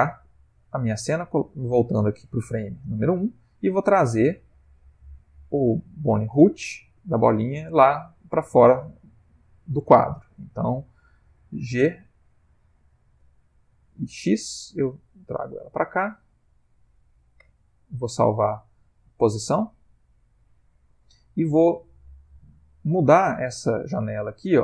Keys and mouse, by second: 0.3 click, 2.9 Left, 4.2 click, 11.9 g, 17.3 i.